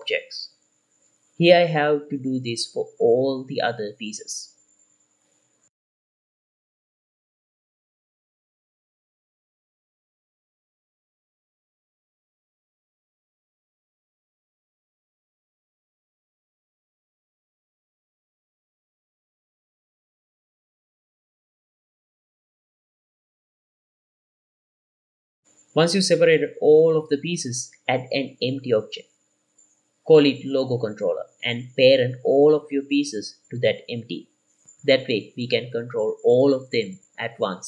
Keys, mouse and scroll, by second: 0.1 click, 1.2 l, 1.6 middle click, 2.6-5.3 typing, 2.6 middle click, 3.3 middle click, 4.8 click, 4.9 middle click, 5.6 middle click, 5.9 alt+a, 6.0 Tab, 6.1 Tab, 6.6 p, 7.4 Tab, 7.5 middle click, 7.8 shift+middle drag, 7.8 click, 8.0 scroll up 2, 8.2 Tab, 8.2 shift+middle click, 8.9 middle click, 8.9 l, 9.7 p, 9.9 middle click, 10.6 Tab, 10.6 click, 10.8-13.9 typing, 10.9 middle click, 11.6 scroll down 2, 11.8 shift+middle click, 12.2 click, 12.4 middle click, 15.0 middle click, 15.5 shift+middle click, 16.1 alt+a, 16.1 Tab, 16.7 middle click, 16.7 click, 16.8-17.2 scroll up 2, 17.0 Tab, 17.2-21.1 typing, 17.5 middle click, 18.5 click, 18.6 middle click, 19.2 click, 19.6 middle click, 20.2 click, 20.7 middle click, 21.3 Tab, 21.5 alt+a, 21.6-22.2 scroll down 1, 22.2 click, 22.3 scroll down 1, 22.4 shift+middle click, 23.4-24.0 middle drag, 23.4 click, 24.1 middle drag, 24.5 shift+middle click, 24.7-26.3 drag, 26.6-27.8 middle drag, 27.8 click, 28.3 shift+a, 29.5 F2, 31.5 l, 31.6 click, 32.1 shift+click, 32.9-33.5 shift+drag, 34.3 ctrl+p, 36.1 click, 37.1 g.